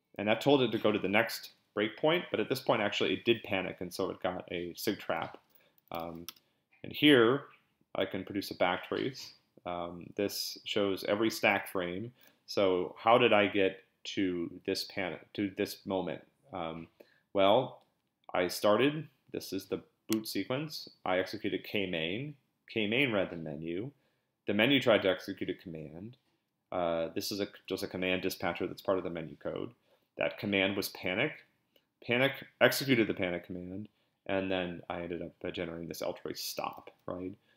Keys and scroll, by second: 5.6-6.5 typing.